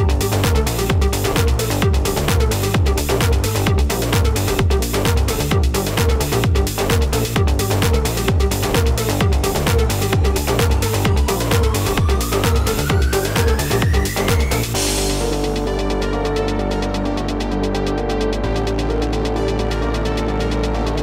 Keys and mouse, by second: 1.4 click, 2.6 click, 3.2 KP_5, 3.4 Tab, 3.7 KP_5, 3.9 Tab, 5.8 click, 6.8 KP_4, 7.1 Tab, 9.0 KP_5, 9.2 Tab, 10.9 click, 13.6 click, 15.2 click, 16.2 right click, 17.8 click, 18.9 click.